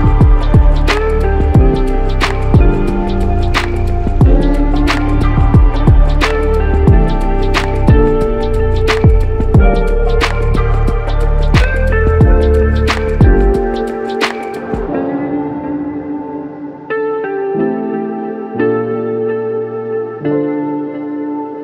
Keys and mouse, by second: 1.6 alt+click, 6.9 shift+click, 12.4 alt+click, 16.1 alt+click, 19.5 shift+click.